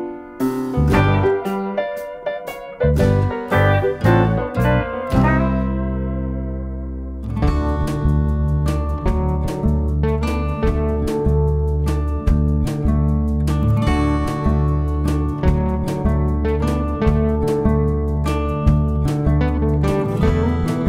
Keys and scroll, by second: 0.8 shift+F6, 2.8 F1, 3.1 typing, 4.8 ctrl+d, 8.9 ctrl+d, 10.4 ctrl+d, 11.4 ctrl+d, 12.6 ctrl+d, 13.9-14.4 typing, 16.1 space, 16.9 shift+F6.